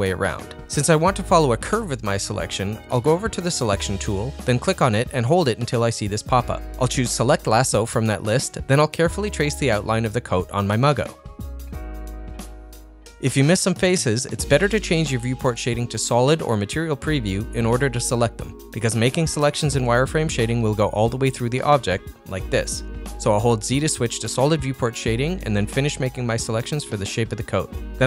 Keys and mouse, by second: 5.5-9.0 drag, 9.4 click, 9.5-13.0 drag, 14.1 shift+click, 15.2 shift+click, 15.7 shift+click, 16.6-17.8 middle drag, 18.5 shift+click, 19.2-20.5 middle drag, 24.1 ctrl+z, 25.1 shift+click, 25.4 middle click, 25.9 middle click, 26.5 middle click, 27.3 shift+click, 27.6-28.0 middle drag.